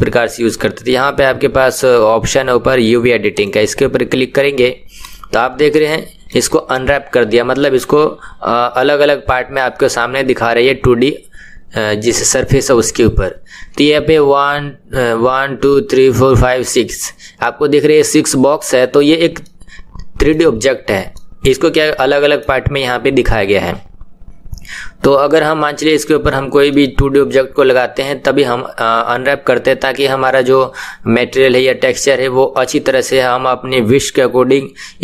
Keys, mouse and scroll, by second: 3.4 click, 5.3-5.9 scroll up 3, 5.9-20.7 shift+middle drag, 20.7-21.2 scroll up 2, 21.2-24.4 middle drag, 26.2-26.9 scroll down 1, 26.9-35.0 middle drag.